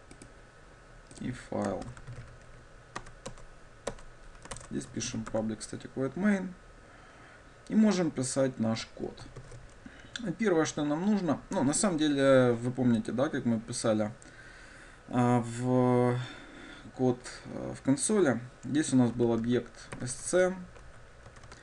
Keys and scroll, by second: 4.7 shift+Return, 5.5 Tab.